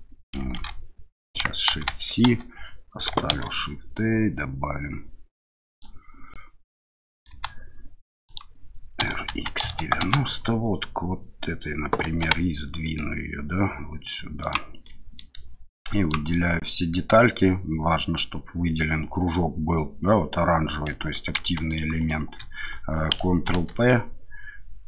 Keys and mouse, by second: 0.6 ctrl+z, 1.7 shift+c, 2.3 KP_7, 3.3 shift+a, 7.3 s, 8.2 click, 9.0 r, 9.3 x, 9.6 KP_9, 9.7 KP_0, 10.0 KP_Enter, 12.2 g, 12.8 middle click, 14.4 click, 14.8-15.2 middle drag, 15.8-16.1 drag, 21.6 shift+click, 22.0 shift+click, 23.4 ctrl+p.